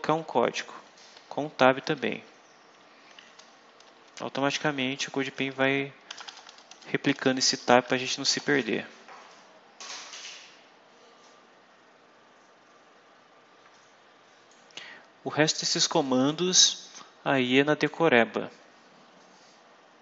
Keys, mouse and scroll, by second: 0.2 shift+Down, 0.7 shift+Left, 1.1 shift+Right, 1.5 shift+Left, 2.0 shift+Right, 2.9 End, 3.7 Return, 4.2 s, 4.7 Return, 5.1 s, 5.3 Return, 6.0 BackSpace, 14.4 click, 16.2-17.9 drag.